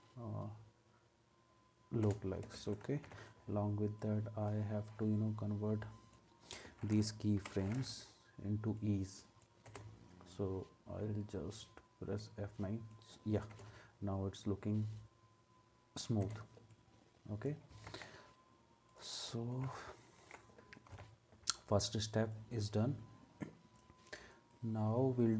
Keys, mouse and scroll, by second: 2.0 space, 3.1 u, 7.4 F9, 9.7 space, 13.6 space, 16.2 space, 17.9 ctrl+s, 20.9 space, 20.9 u.